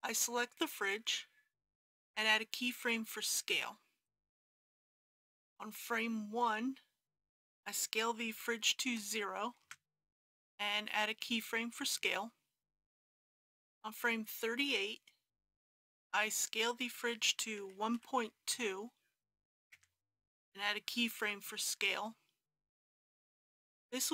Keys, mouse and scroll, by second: 2.7 i, 4.0 click, 8.3 s, 8.8 KP_0, 11.0 i, 11.8-13.7 drag, 17.6 s, 18.0 KP_1, 18.2 KP_Decimal, 18.5 KP_2, 21.2 i, 22.7-24.1 drag.